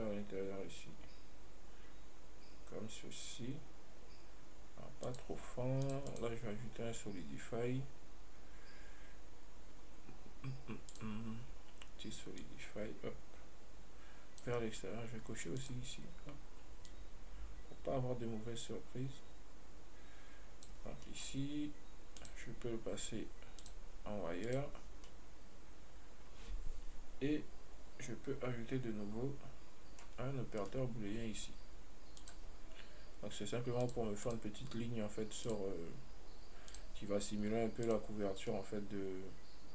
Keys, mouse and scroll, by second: 12.7-15.7 drag, 15.8 click, 17.1-20.2 drag, 21.3-22.4 middle drag, 22.4 click, 23.8-25.3 drag, 25.3-28.4 middle drag, 30.9 right click, 32.5 click, 34.1 click, 34.5-37.0 drag, 38.7-39.7 middle drag.